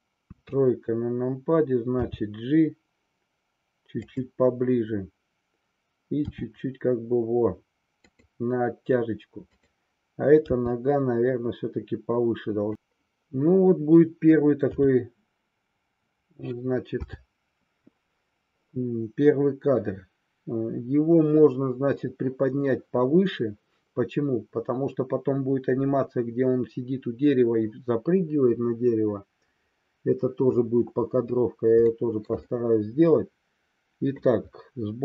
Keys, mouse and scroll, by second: 0.2 KP_3, 1.9 g, 6.2 r, 8.2 click, 9.6 click, 10.7 g, 14.6 a, 17.0 i, 31.9-32.4 shift+middle drag, 32.5-34.2 middle drag.